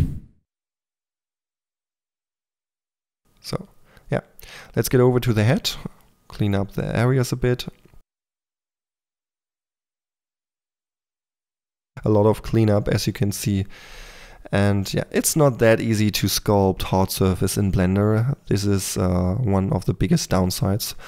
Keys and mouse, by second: 0.1 f, 1.3-2.3 drag, 2.3 middle click, 2.9-3.8 drag, 3.8 f, 3.9 click, 4.4 f, 4.5 f, 5.9 Tab, 6.5 f, 6.6 click, 7.5-9.1 drag, 8.8-11.8 typing, 9.5 click, 10.0 click, 10.6 click, 11.4 click, 12.4 click, 12.9-13.7 drag, 13.7 KP_4, 13.9 f, 14.3-15.6 drag, 15.6 KP_3, 15.9 drag, 16.3 click, 16.3 k, 16.4 f, 16.7 f, 17.0 drag, 18.6 click, 19.4-20.0 drag, 20.2 click, 20.3-20.9 typing.